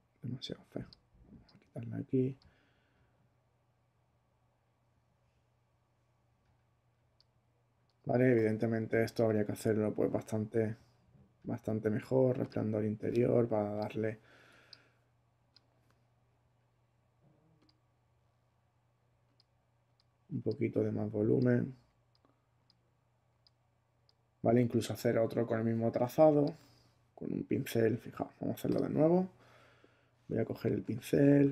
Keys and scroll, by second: 30.6 b, 31.2 <.